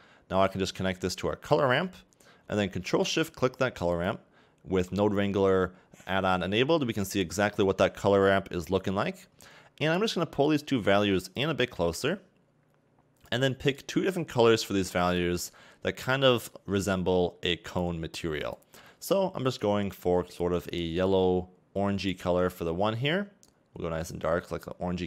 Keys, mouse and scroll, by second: 4.0 ctrl+shift+click, 6.8-7.5 scroll up 3, 7.5 shift+middle click, 8.5-10.1 scroll up 2, 10.5 click, 12.0 click, 13.8 click, 15.1 click, 17.5 click, 20.0 click.